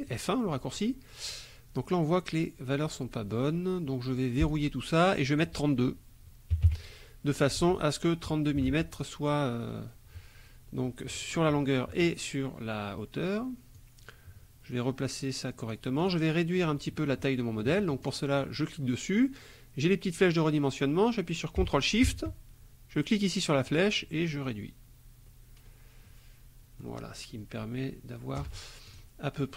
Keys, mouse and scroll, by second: 0.0 click, 4.4 click, 5.3 click, 6.6 KP_3, 6.7 KP_2, 8.8 Tab, 8.9 click, 13.8-15.9 drag, 16.0 click, 18.0 click, 23.7-28.6 ctrl+shift+drag, 28.9 ctrl+shift+click.